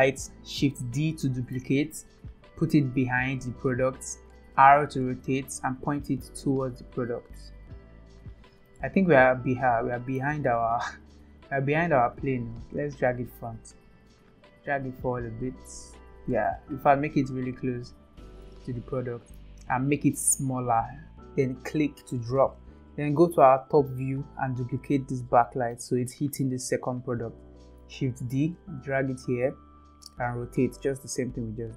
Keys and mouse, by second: 0.6 click, 1.7 shift+d, 4.5 r, 8.8-10.2 middle drag, 12.7 KP_7, 14.0 g, 18.5-19.4 middle drag, 20.5 s, 23.5 KP_7, 25.8-26.1 shift+middle drag, 28.0 shift+d, 30.2 r.